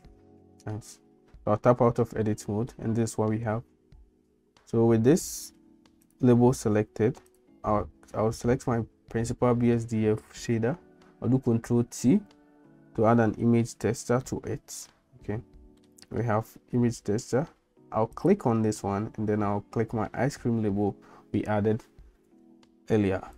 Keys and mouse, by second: 1.5 Tab, 2.2 middle click, 6.1 click, 11.9 ctrl+t, 14.3 middle click, 15.8 middle click, 18.1-23.3 drag.